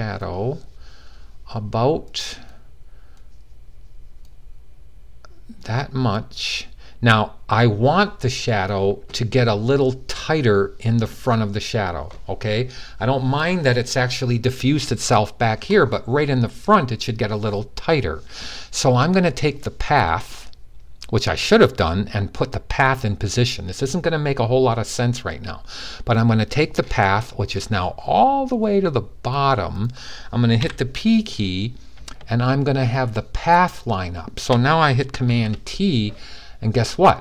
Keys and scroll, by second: 30.3 p, 35.0 super+t.